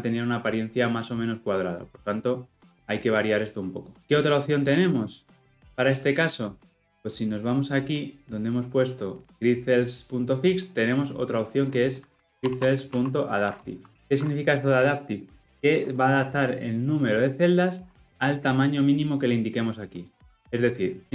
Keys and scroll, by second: 13.4 Return.